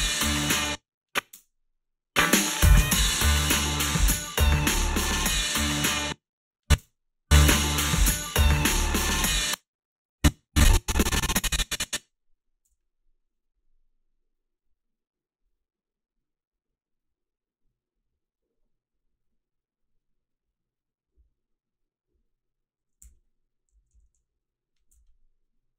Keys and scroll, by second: 0.5 space, 1.3 space, 5.9 space, 6.8 space, 9.2 space, 12.7 g, 23.0 h, 23.8 a, 24.9 h.